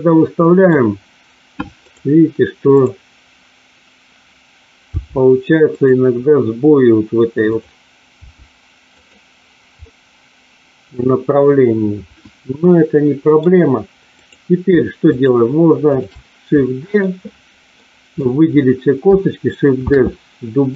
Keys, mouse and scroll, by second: 1.9 click, 2.7 click, 5.0 g, 5.6 click, 8.1 g, 8.9 click, 9.9-13.4 middle drag, 14.1 click, 15.2 shift+click, 16.6 middle click, 17.7 middle click, 19.9 shift+d, 20.6 click.